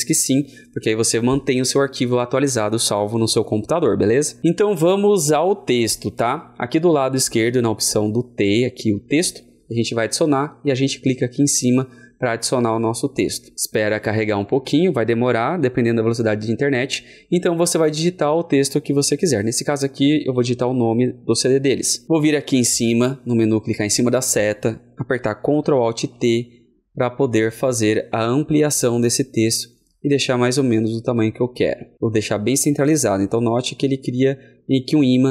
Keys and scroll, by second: 25.9 ctrl+alt+t.